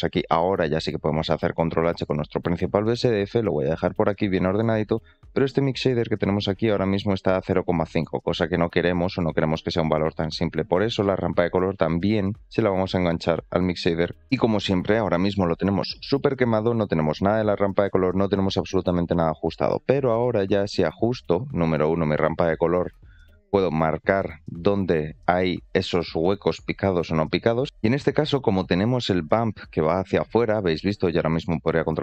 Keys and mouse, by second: 5.1 click, 6.2 click, 7.8 click, 8.0 g, 10.2 middle click, 11.0 shift+middle click, 11.9 click, 12.1-14.1 drag, 15.8 middle click, 19.0 middle click, 20.2 shift+middle click, 22.2-27.4 drag, 28.2 middle drag, 31.4-31.7 middle drag.